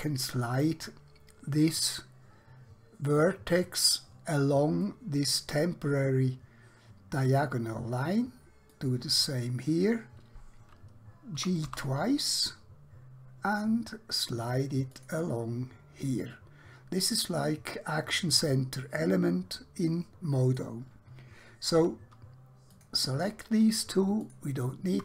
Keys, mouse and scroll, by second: 3.7 click, 4.9 middle click, 8.8 click, 11.4 g, 11.7 g, 15.0 click, 16.1-20.4 middle drag, 21.8 2, 22.8 click, 24.3 shift+click.